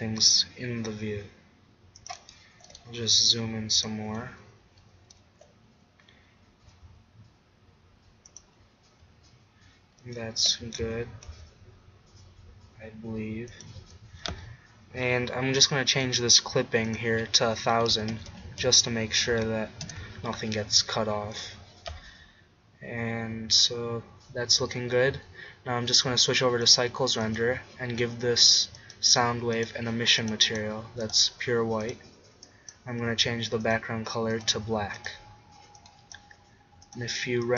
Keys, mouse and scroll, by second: 2.2-4.5 drag, 2.6 g, 5.4 g, 9.0 z, 10.4 g, 15.9-18.9 drag, 18.1 0, 18.7 0, 21.3-23.3 drag, 25.9-27.3 drag, 27.9 middle click, 36.7 middle click.